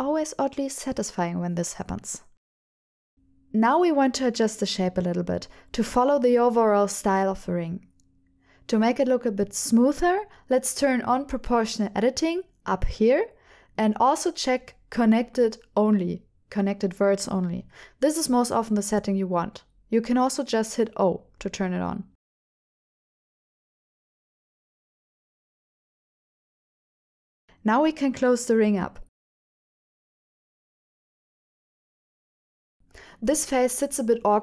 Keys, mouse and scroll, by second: 0.0 shift+click, 0.4 middle click, 1.7 KP_7, 2.8 ctrl+alt+shift+p, 3.5 g, 3.9 y, 5.9 right click, 6.3 KP_7, 6.7 g, 6.9 y, 8.1 right click, 13.8 click, 14.7-18.6 drag, 20.9 shift+middle click, 22.1 g, 22.1 y, 23.8 click, 23.9 click, 24.0 shift+click, 24.1-26.5 typing, 24.6 click, 24.7 shift+middle click, 24.9 shift+middle click, 24.9 middle click, 25.0 click, 25.0 middle click, 25.4 click, 26.2 click, 26.9 click, 27.1 middle click, 28.6 shift+click, 29.2 f, 29.5 f, 29.7 middle click, 30.2 shift+click, 30.4 shift+click, 30.7 f, 30.9 middle click, 32.1 f, 32.4 click, 32.7 shift+click, 32.9 shift+click.